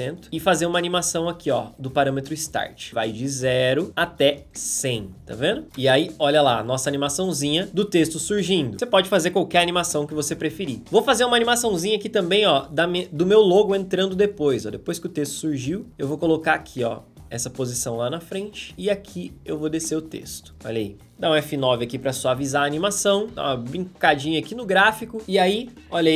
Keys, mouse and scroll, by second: 5.7 space, 11.7 p, 20.5 space, 21.7 F9, 25.2 space.